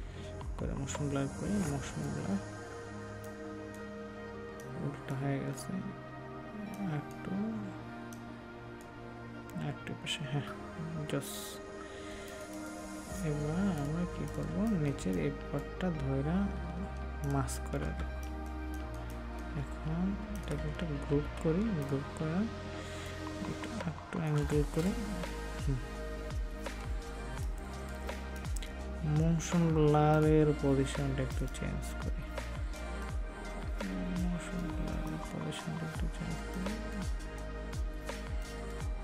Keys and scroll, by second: 17.9 ctrl+space, 21.1 ctrl+g, 27.0 ctrl+space.